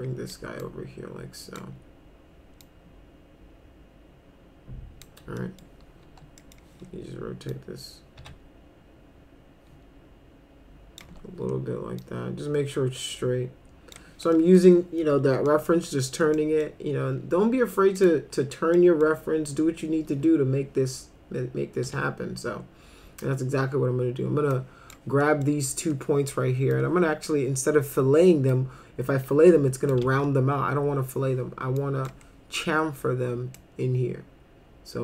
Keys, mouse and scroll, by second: 0.6 click, 2.6-5.0 drag, 5.4 middle click, 6.0 e, 6.4 middle click, 7.5-11.0 drag, 8.2 a, 11.0 w, 12.0-14.0 drag, 14.4 middle click, 15.5 middle click, 16.3 middle click, 18.0 click, 18.8 middle click, 21.9 1, 24.5 click, 25.2 middle click, 26.7 click, 28.5-29.9 drag, 30.0 ctrl+z, 31.8 click, 33.6-35.0 drag.